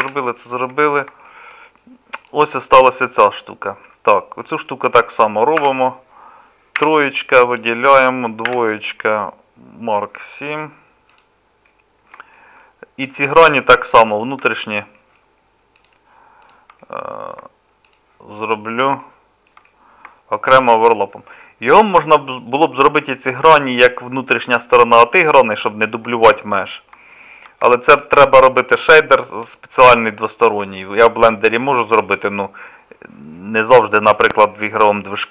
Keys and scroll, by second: 0.1 h, 5.6 Tab, 6.8 3, 8.5 2.